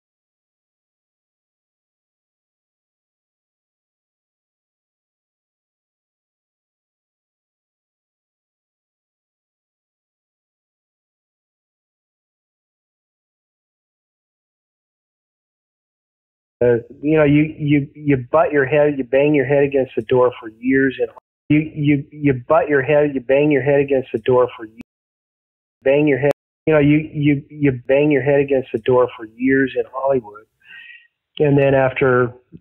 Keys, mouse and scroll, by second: 1.1 ctrl+s, 2.2 click, 16.5 space, 20.3 click, 21.1 space, 21.3 click, 21.4 space, 23.3-24.7 drag, 24.7 space, 25.3 ctrl+shift+Delete, 25.7 space, 26.2 space, 26.5 click, 26.5 space, 28.4 click, 29.8 click, 31.1-32.6 drag.